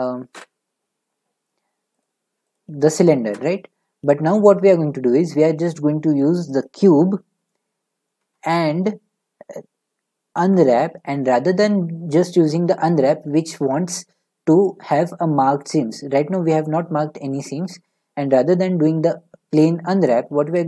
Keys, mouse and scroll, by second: 0.4 Delete, 2.0 click, 2.5 click, 3.2 a, 6.6 click, 7.4-9.7 drag, 8.2 Tab, 10.3 u, 17.6 u, 18.8 u.